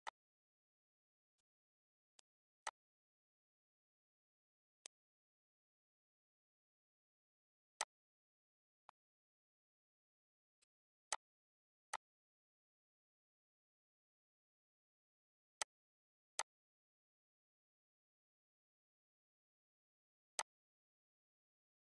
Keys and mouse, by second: 1.4 click, 1.8 click, 2.2 click, 2.6 click, 3.2 click, 4.8 click, 6.7 click, 7.8 click, 8.9 click, 9.9 click, 10.6 click, 11.1 click, 11.9 click, 15.6 click, 16.3 click, 17.9 click, 19.0 click, 19.7 click, 20.4 click, 21.5 click.